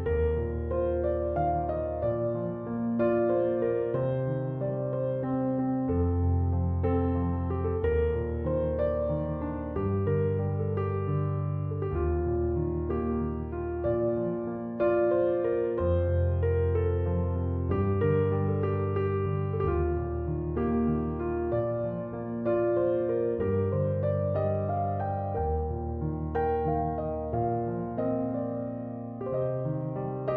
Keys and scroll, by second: 16.2 Return.